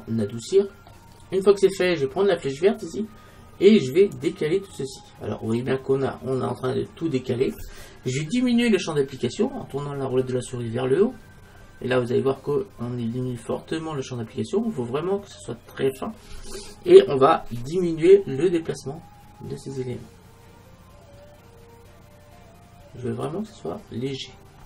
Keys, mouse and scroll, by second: 0.7-2.0 middle drag, 4.2 click, 5.2 click, 5.4 click.